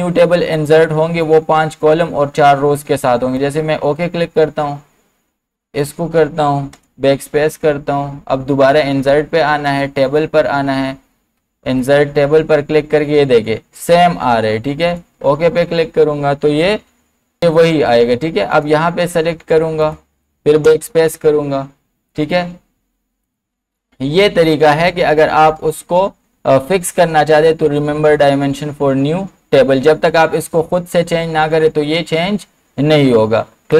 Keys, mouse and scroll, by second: 3.4 click, 6.8 BackSpace, 8.7 click, 14.8 click, 14.8 click, 18.5 click, 20.7 BackSpace, 22.1 click, 33.7 click.